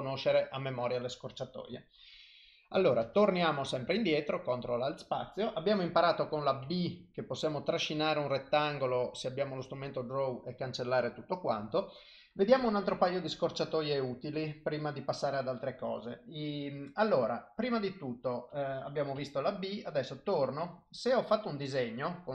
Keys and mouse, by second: 3.1 ctrl+alt+space, 6.7 b, 17.3 b, 20.5 click, 21.5 click.